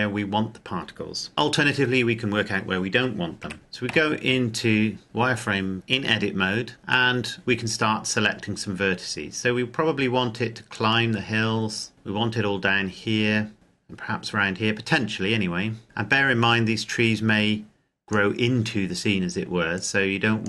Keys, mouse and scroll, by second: 3.3 z, 3.7 a, 7.4-9.3 scroll down 1, 10.5 click, 19.5 click.